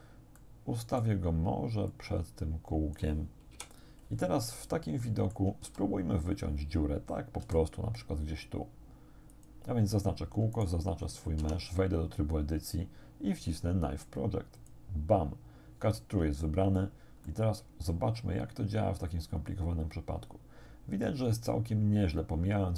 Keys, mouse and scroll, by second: 0.4 click, 1.9-3.2 drag, 3.6 1, 4.4-5.0 scroll up 3, 5.0 shift+click, 5.3 shift+middle click, 5.7 shift+s, 6.3 click, 7.4 g, 9.4 click, 10.6 shift+right click, 11.4 shift+Tab, 14.6 click, 17.3-22.7 drag.